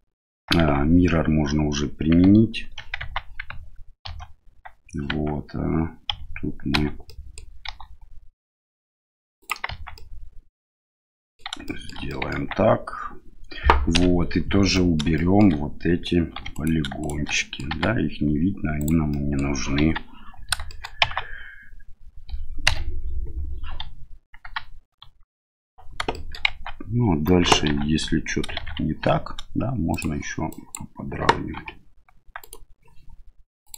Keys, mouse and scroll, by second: 0.6 Tab, 3.0 Tab, 4.0 ctrl+a, 5.1 Tab, 6.1 a, 6.7 a, 7.1 middle click, 7.7 e, 9.7 Tab, 9.9-11.4 middle drag, 11.6 middle drag, 12.1 middle drag, 12.4 Tab, 13.9 KP_Divide, 14.7 middle click, 15.1 shift+middle click, 16.4 3, 16.5 right click, 17.0 right click, 17.3 middle click, 17.7 x, 19.1 middle click, 19.8 KP_1, 20.7 shift+middle click, 21.0 Tab, 22.7 KP_Divide, 23.8 KP_1, 25.0 KP_3, 26.1 shift+middle drag, 26.5 Tab, 27.7 1, 28.6 shift+z, 29.9 click, 30.5 click, 31.6 r, 33.6-33.7 drag.